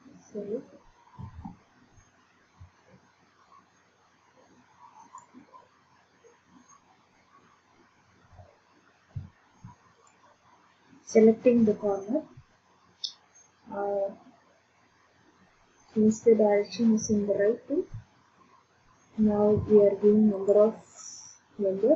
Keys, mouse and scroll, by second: 1.2 ctrl+z, 5.2 click, 8.5 middle click, 10.1 click, 20.5 click.